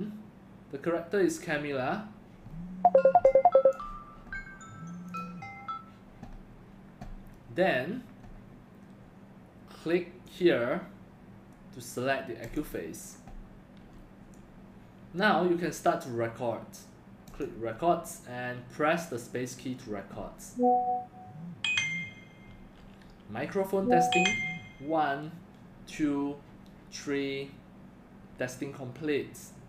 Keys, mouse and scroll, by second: 2.5 scroll up 1, 3.2 x, 3.3-3.7 drag, 5.1 click, 5.6 click, 6.0 click, 6.8 click, 22.4 space.